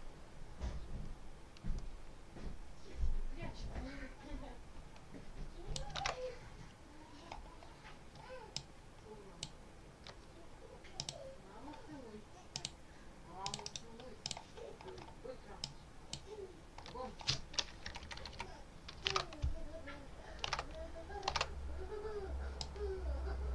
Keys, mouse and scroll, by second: 5.9 alt+Tab, 8.4 shift+click, 10.9 click, 12.4 click, 13.3 click, 13.5 right click, 14.1 click, 15.5-16.2 shift+drag, 17.7 Left, 18.9 alt+Tab, 20.4 alt+Tab, 21.1 alt+Tab, 22.5 click.